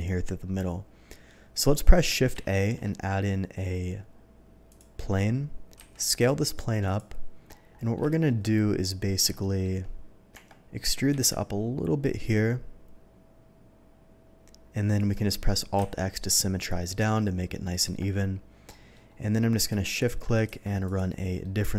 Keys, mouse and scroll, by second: 2.5 shift+a, 4.6 click, 5.7 s, 6.8 click, 7.4-7.8 scroll up 2, 8.0 shift+middle drag, 8.4-8.9 shift+scroll up 2, 9.4 shift+middle drag, 10.3 Tab, 11.1 e, 14.9 shift+click, 17.8 Tab, 18.7 middle drag, 19.6 shift+middle click, 19.9 shift+click, 20.4 q, 20.8 click, 21.4-21.7 middle drag.